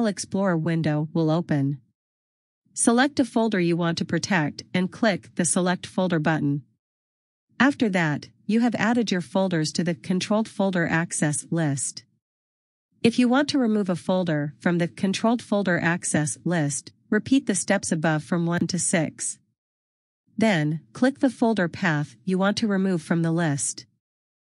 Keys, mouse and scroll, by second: 4.7-5.0 scroll down 1, 5.3-6.3 scroll up 1, 6.3 click, 12.2 click, 14.5 click, 19.4 click.